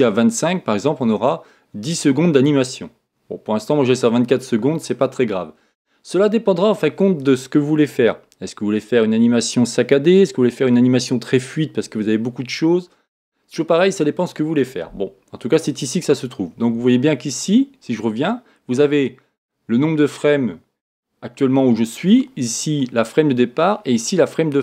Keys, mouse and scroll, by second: 18.1-19.1 drag, 22.8-24.6 drag.